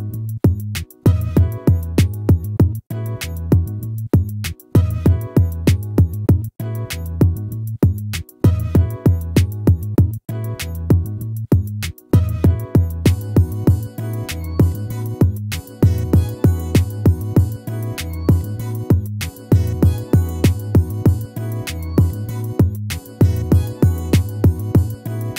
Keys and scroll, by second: 2.3 ctrl+-.